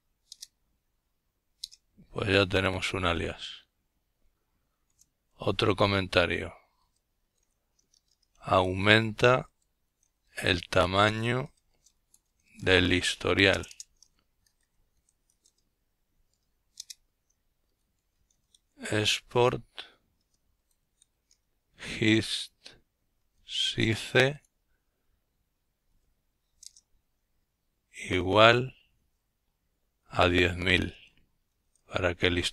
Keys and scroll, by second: 3.0 typing, 5.2-14.0 typing, 14.8 Return, 15.4-17.5 typing, 18.7-22.4 typing, 23.6-26.0 typing, 27.9-30.3 typing.